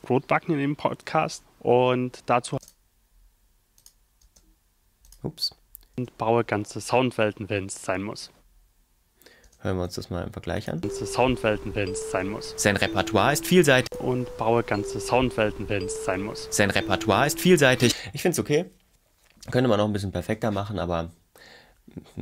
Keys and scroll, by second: 2.5 space, 4.2 space, 6.0 space, 9.4 space, 10.8 space, 17.9 space.